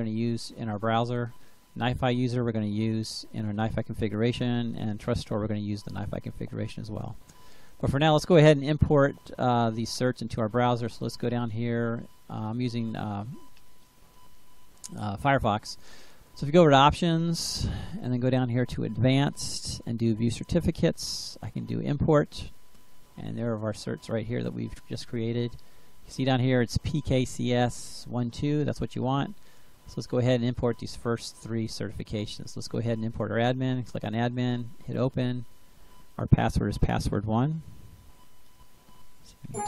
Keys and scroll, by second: 36.2-39.4 typing.